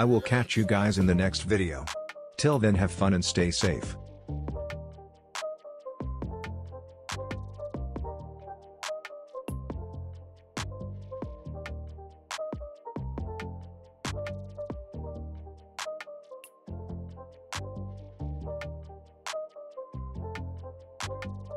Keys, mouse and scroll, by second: 1.5 space.